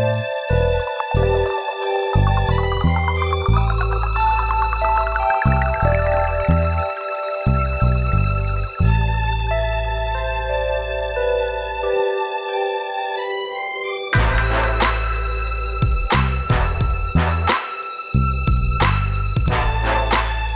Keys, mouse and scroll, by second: 0.0 click, 1.0 scroll up 2, 3.1 scroll down 2, 7.2 scroll up 2, 8.5 click, 9.8 click, 11.2 scroll down 3, 12.3 click, 13.0 click, 13.7 click, 14.8 click, 14.9 click, 15.6 click, 16.4 click, 17.4 click, 17.7 click, 18.7 click.